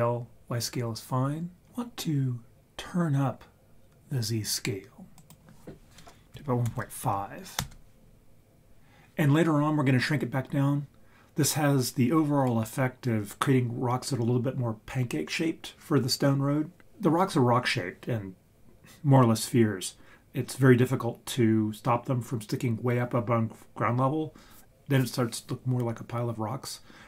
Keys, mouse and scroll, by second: 5.2-7.7 drag.